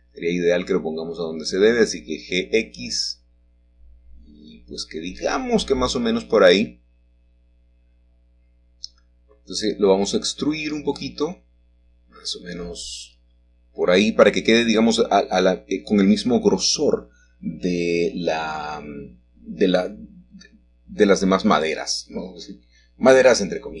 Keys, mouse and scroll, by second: 2.7 middle click, 4.0 g, 4.7 x, 8.0 click, 8.9 shift+middle click, 10.6 middle click, 12.3 click, 16.0 click, 18.0 middle click, 19.0-20.0 shift+middle drag, 20.0-21.1 scroll down 2, 21.1-22.2 scroll down 1, 22.3-23.8 scroll down 2.